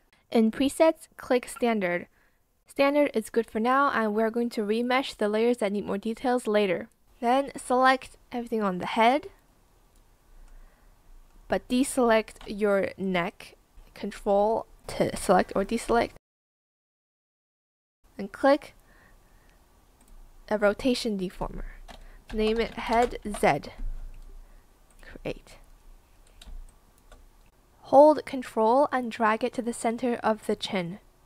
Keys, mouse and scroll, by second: 12.9 ctrl+click, 22.0-23.3 typing, 26.4 space, 26.6 click, 28.1 ctrl+click, 30.8 ctrl+z, 31.1 ctrl+click.